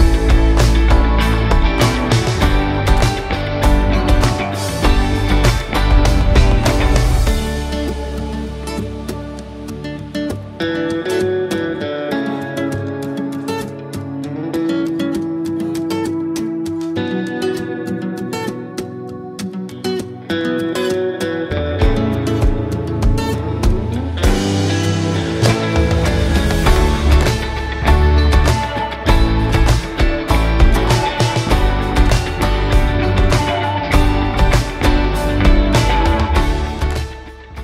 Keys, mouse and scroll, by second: 0.6 click, 4.3 click, 4.6 w, 5.6-7.8 drag, 8.6 typing, 11.5-12.3 typing, 13.0-15.7 drag, 16.0 w, 16.4-17.4 drag, 21.0-21.4 scroll down 1, 21.4 scroll up 1, 22.5 scroll down 1, 23.4 scroll up 1, 23.7-24.3 alt+click, 24.7-25.4 alt+middle click, 25.7-26.3 alt+drag, 33.3-33.7 scroll down 1, 33.7 scroll up 1, 34.7 scroll down 1, 35.0-35.7 alt+click, 35.9 scroll down 1, 36.2-36.7 alt+click, 36.9-37.6 scroll up 1.